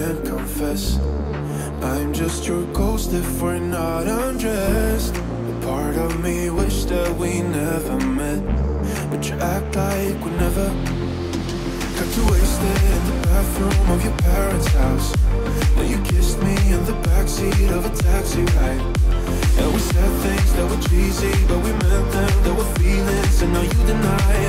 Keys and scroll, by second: 8.9 1, 9.3 0.